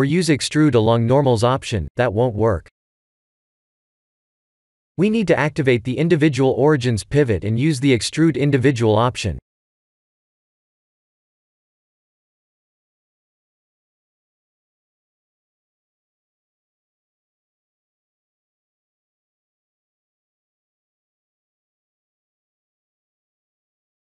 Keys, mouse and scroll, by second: 2.1 click, 3.1 middle click, 4.0 ctrl+z, 5.8 click, 7.9 click, 11.6 ctrl+z, 12.4 click, 14.7 click.